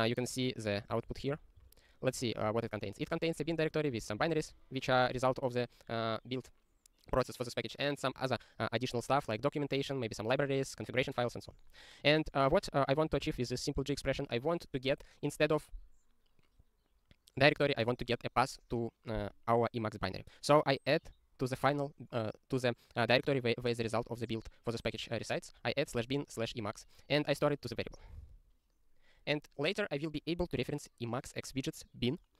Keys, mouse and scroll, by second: 13.2 click, 13.3 ctrl+a, 13.4 ctrl+space, 13.5 ctrl+e, 13.8 ctrl+g, 21.1 click, 27.4 click, 27.8 ctrl+e.